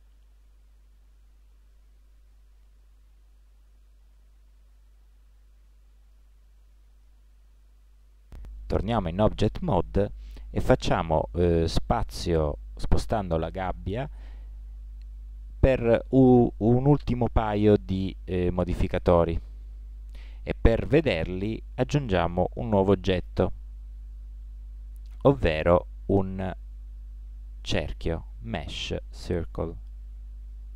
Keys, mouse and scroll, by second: 0.0 middle click, 0.3 middle click, 0.6 middle click, 1.5 middle click, 1.7 middle click, 1.9 middle click, 3.4-7.9 middle drag, 9.5-15.8 middle drag, 15.8 Tab, 17.1 middle click, 19.4 g, 22.3-24.0 middle drag, 24.5 shift+a.